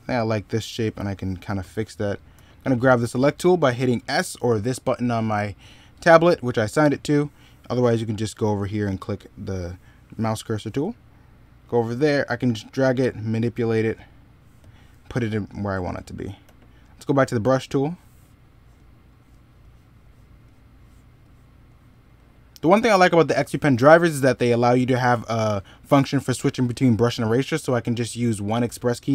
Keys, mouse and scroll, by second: 1.3 middle click, 2.2 s, 16.3 e, 17.3 b, 23.8 middle click.